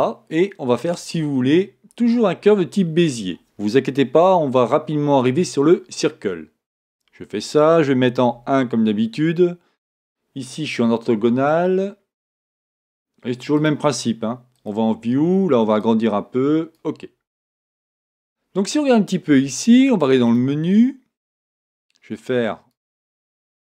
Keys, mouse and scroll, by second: 8.3 KP_1, 12.5-23.7 drag, 18.0 Tab.